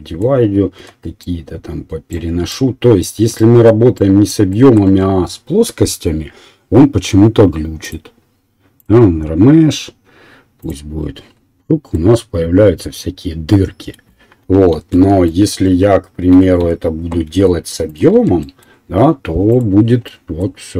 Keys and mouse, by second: 0.9 1, 1.2-5.4 right drag, 4.9 Tab, 5.4-7.9 drag, 7.9-9.0 drag, 14.9 ctrl+z, 15.7 Tab, 16.3 a, 16.6 a, 17.2 e, 18.0-19.5 drag, 18.2 Tab.